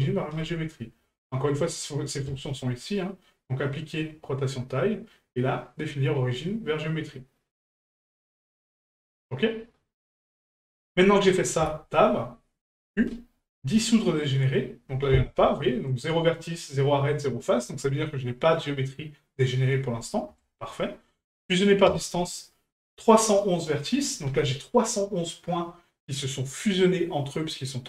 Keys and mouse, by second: 2.3-9.9 drag, 10.3-10.6 middle drag.